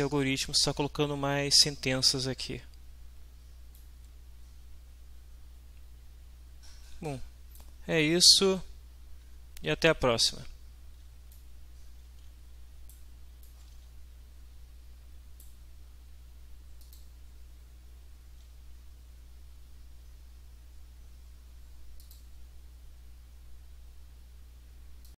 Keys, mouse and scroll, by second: 3.8-7.8 right drag, 11.3-11.8 right drag, 11.8 middle click, 12.0-12.6 right drag, 12.0 w, 12.6-13.1 middle drag, 13.4-15.6 right drag, 13.7 w, 16.8 click, 22.0 click, 25.0 click.